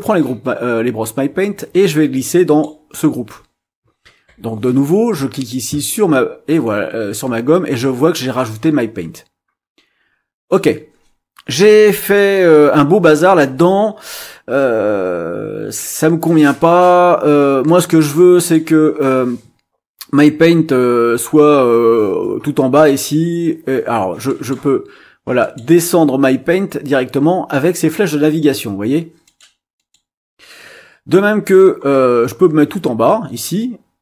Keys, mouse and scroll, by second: 0.0-2.8 drag, 5.3-10.7 drag, 12.0 click, 17.7 click, 18.4 click, 24.3 click, 25.4 click, 29.2 click, 29.7 click.